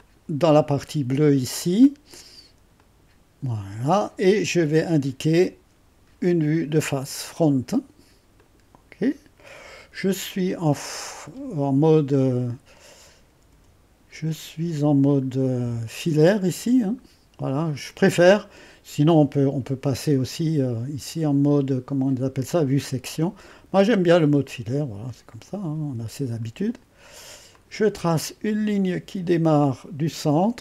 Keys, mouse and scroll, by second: 0.0-5.3 drag, 8.4-10.3 drag, 10.3 middle click, 12.0 typing, 13.5 typing, 16.8-21.1 drag, 23.2-23.8 scroll up 1, 23.8-25.0 scroll down 2, 25.0 click, 27.5-28.7 drag.